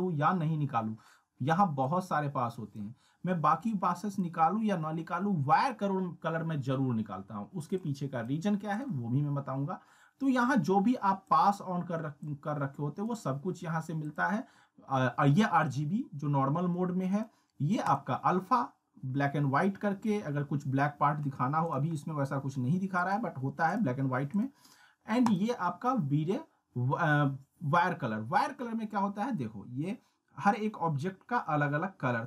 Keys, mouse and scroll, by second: 1.0 scroll down 1, 1.8-2.7 drag, 7.8-8.4 click, 11.3-13.1 drag, 21.6 click, 21.9-22.2 scroll down 1, 23.0 click, 26.2-26.7 scroll down 1.